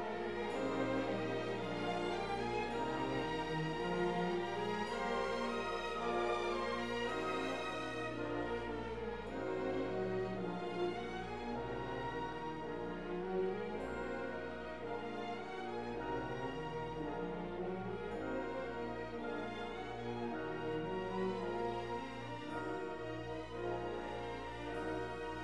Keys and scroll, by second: 9.7 ctrl+z, 19.5 F4, 20.5 ctrl+z, 24.1 F4, 24.4 c.